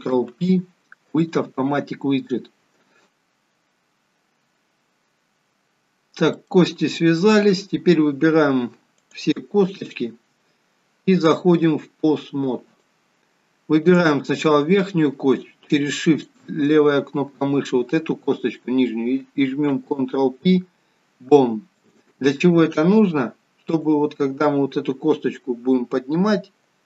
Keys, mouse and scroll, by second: 0.1 ctrl+p, 5.9-6.9 scroll down 3, 6.9 middle click, 6.9-7.9 scroll up 3, 9.1 click, 9.9 shift+click, 11.7 click, 13.9 click, 16.4 shift+click, 19.7 ctrl+p, 23.9 click.